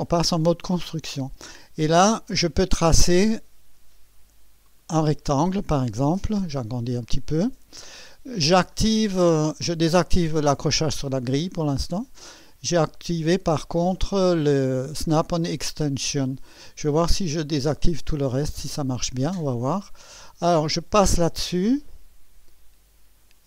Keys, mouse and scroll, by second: 4.6 click, 6.2 scroll up 1, 7.0 right click, 11.7 click, 16.9 click, 17.6 click, 18.7 click.